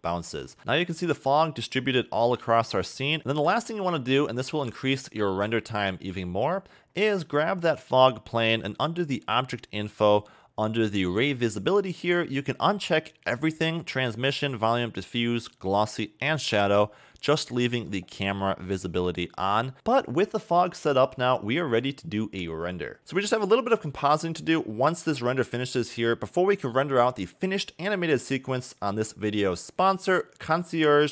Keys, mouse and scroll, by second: 0.3 a, 0.5 a, 1.1 KP_0, 3.0 a, 3.1 a, 3.2 middle click, 3.3 scroll down 7, 4.1 scroll down 5, 6.4 click, 7.0 scroll down 2, 7.7 click, 9.1 click, 10.2-10.6 scroll down 5, 13.3 click, 14.3 click, 14.7 click, 15.5 click, 16.3 click, 17.0-17.3 scroll up 3, 18.9 KP_0.